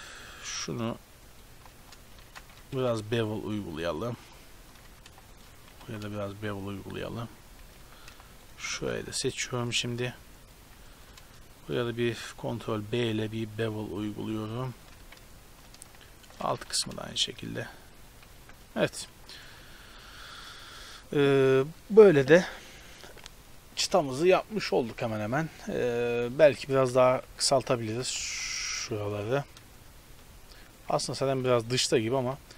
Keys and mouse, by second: 1.2-2.3 middle drag, 2.2 ctrl+z, 2.3-4.3 drag, 2.8 ctrl+b, 4.9 a, 5.4-7.2 drag, 6.0 ctrl+b, 7.8 a, 8.4-10.6 drag, 8.8 KP_Decimal, 12.2 ctrl+b, 15.0 a, 16.3-18.1 drag, 16.7 ctrl+b, 18.4 a, 18.9 Tab, 19.4 a, 26.7-29.0 typing, 27.0 Tab, 31.4 b.